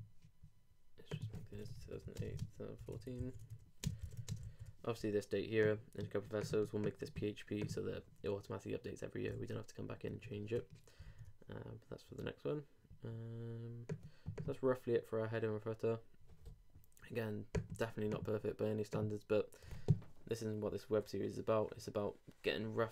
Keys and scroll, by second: 3.2 super+BackSpace, 3.4 super+Tab, 3.8 super+space, 4.0 super+Tab, 4.3 super+space, 4.4 super+s, 11.0 super+r.